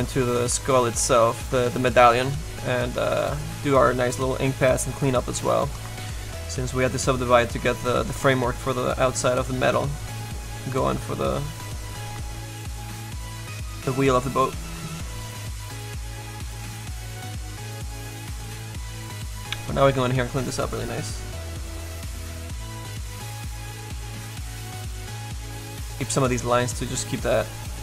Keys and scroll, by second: 20.5 s, 22.0 z.